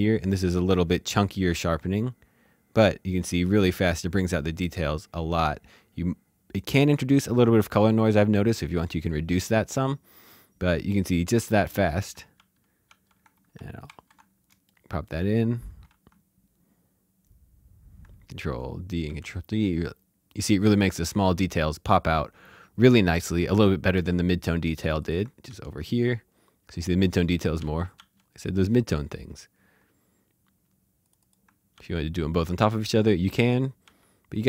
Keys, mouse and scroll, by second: 1.8-3.0 scroll down 1, 9.4-11.0 scroll down 1, 12.1 ctrl+Num_Lock, 12.1 ctrl+scroll down 1, 12.3 ctrl+d, 12.8 ctrl+d, 13.2-14.3 typing, 14.7 shift+middle click, 18.3 ctrl+d, 23.9 d, 24.8 click, 25.4 d, 27.6 d, 27.9 d, 31.0 click, 31.7 d, 33.8 d.